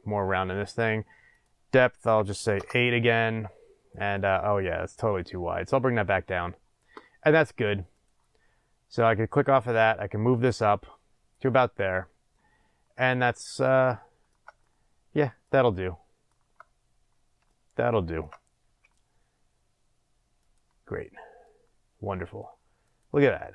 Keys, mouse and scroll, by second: 1.3-2.6 drag, 2.6 Return, 4.1 click, 6.7-8.1 drag, 9.5-13.4 drag, 13.4-20.5 shift+middle drag, 16.6-17.4 scroll up 2, 18.6 s, 20.5 click, 21.4-23.0 drag, 23.4-23.5 shift+middle drag.